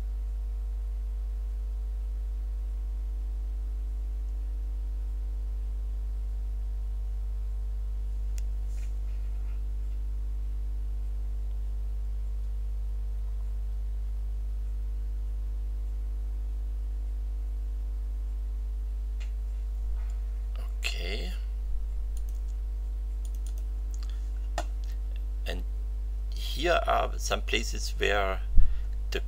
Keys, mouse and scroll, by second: 22.1 click, 23.2 click.